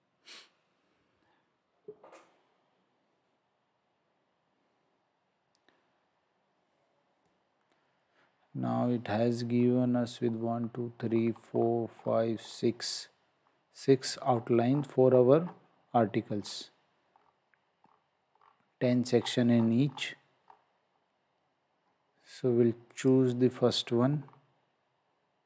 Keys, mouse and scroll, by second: 9.5 scroll down 1, 14.2 scroll up 1, 16.2 scroll up 1, 23.0 click, 24.2-25.0 scroll down 1.